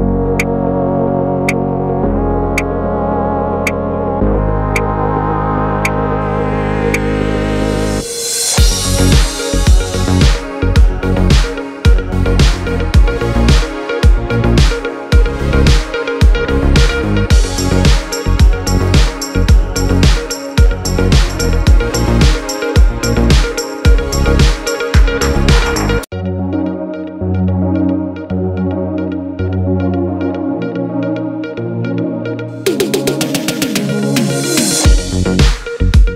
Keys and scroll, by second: 33.9 t, 35.8 u.